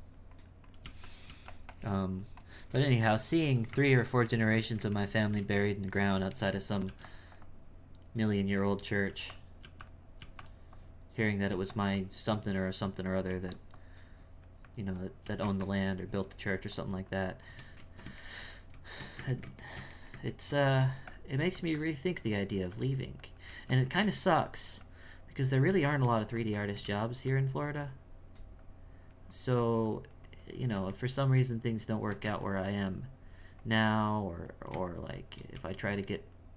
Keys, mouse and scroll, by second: 0.0 click, 0.9 f, 1.7-3.0 drag, 3.0 shift+middle click, 3.4 f, 4.3-6.9 ctrl+middle drag, 7.4-9.1 drag, 9.6 f, 10.7 click, 11.5 f, 12.0-13.3 drag, 13.8-15.3 drag, 15.6-18.2 shift+drag, 18.2-20.8 shift+middle drag, 21.4 f, 21.7-23.5 drag, 24.0 f, 24.8 click, 25.7 f, 26.2 shift+click, 27.7-32.2 drag, 32.2 f, 32.8-35.6 drag, 36.0 click.